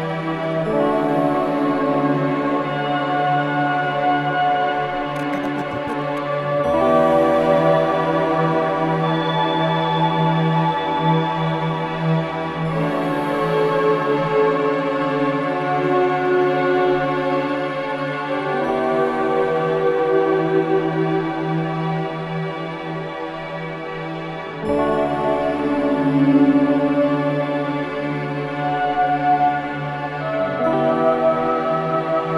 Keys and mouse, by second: 0.6 click, 2.9 click, 4.1-8.2 drag, 8.8-12.6 drag, 16.0 ctrl+c, 17.7-21.5 drag, 22.5 ctrl+v, 23.7-29.1 drag, 31.7 click, 32.1 click.